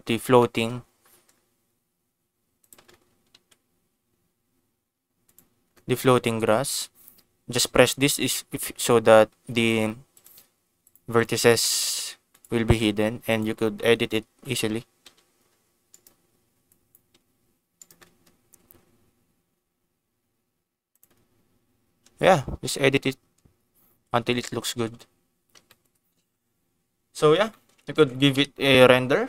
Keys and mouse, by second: 0.3 shift+middle click, 2.6 click, 3.3 Tab, 5.2 click, 8.1 click, 8.7 click, 9.5 click, 10.1 click, 10.8 click, 11.1 click, 11.3 click, 11.7 click, 12.3 click, 13.3 click, 14.2 l, 15.0 g, 15.8 click, 16.7 click, 17.1 g, 17.7 right click, 20.8 click, 20.8 g, 23.8 Tab, 24.3 click, 24.7 ctrl+s, 25.6 shift+middle click, 26.4 ctrl+s, 27.4 shift+middle click, 28.0 ctrl+s.